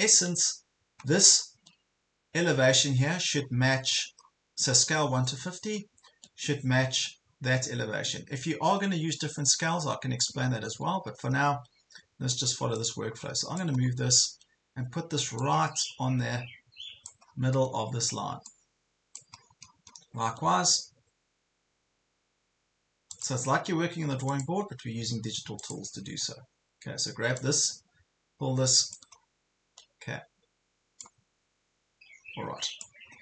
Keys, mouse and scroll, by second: 1.3 ctrl+scroll down 1, 2.7 ctrl+scroll down 1, 3.4 scroll down 1, 4.9 ctrl+scroll up 1, 5.7 ctrl+scroll down 1, 8.6 ctrl+scroll down 1, 10.6 ctrl+scroll up 1, 11.5 ctrl+scroll up 1, 12.8 click, 13.8 ctrl+scroll up 1, 15.4-17.6 drag, 17.2 scroll up 1, 18.5 click, 19.4 ctrl+scroll down 1, 19.9 ctrl+scroll down 1, 23.2-28.9 drag, 29.2-29.6 ctrl+scroll up 2, 31.5-33.0 drag, 33.1-33.2 ctrl+scroll down 2.